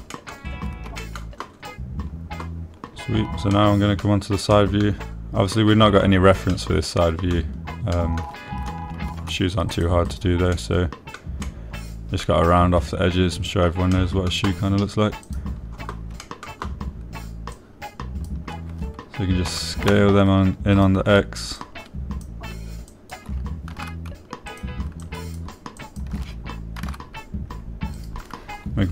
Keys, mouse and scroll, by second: 1.5 shift+middle click, 2.4 shift+middle click, 4.9 middle click, 5.9 click, 7.9 middle click, 9.3 middle click, 10.5 ctrl+r, 11.4 click, 11.9 click, 12.8 click, 15.3 click, 16.6 click, 17.6 shift+click, 19.0 click, 20.9 s, 21.3 x, 22.1 click, 23.1 shift+click, 24.4 shift+click, 25.1 s, 25.2 x, 25.9 click, 26.5 click, 27.3 shift+click, 28.2 s, 28.3 x.